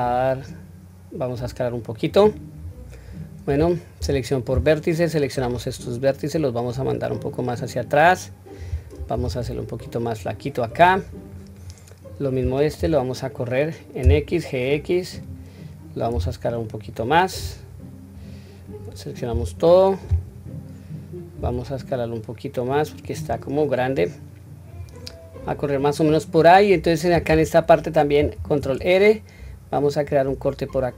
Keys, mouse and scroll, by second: 2.6-3.7 scroll down 3, 3.1-3.7 scroll up 1, 4.0-4.4 scroll up 1, 4.0 1, 5.1 click, 6.3-8.7 drag, 9.2 s, 11.3 click, 12.8 g, 17.3-18.2 scroll down 1, 18.2-19.2 scroll down 1, 19.3 scroll up 2, 19.3 a, 21.4 s, 23.9 click, 25.1-25.7 scroll down 1, 26.0-26.9 scroll down 1, 26.9-27.4 scroll up 1, 28.2 ctrl+r.